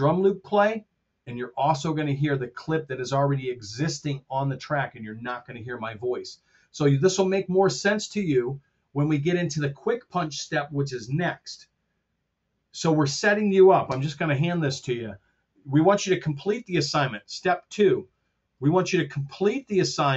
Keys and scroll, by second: 13.8 super+Tab.